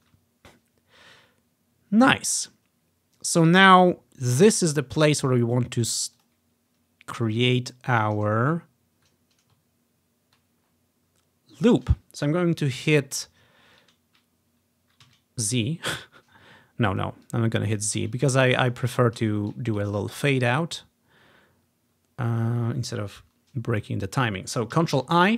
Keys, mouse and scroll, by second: 2.7-3.5 ctrl+scroll up 1, 3.5 ctrl+scroll up 1, 5.0 ctrl+scroll up 1, 6.3-7.5 drag, 7.6 click, 8.4-9.2 ctrl+scroll up 1, 10.7-11.9 ctrl+scroll down 2, 13.5-13.9 scroll up 2, 15.1 z, 16.9 click, 17.3 click, 18.3-18.9 ctrl+scroll up 1, 19.7-21.6 ctrl+scroll down 1, 21.6-22.7 ctrl+scroll up 1, 25.1 ctrl+i.